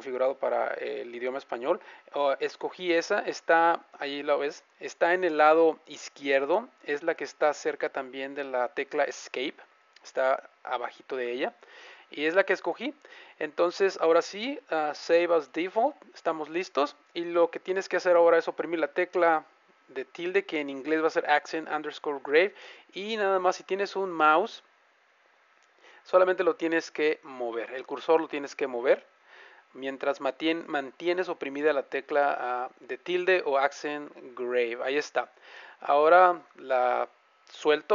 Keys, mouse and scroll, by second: 19.9 `.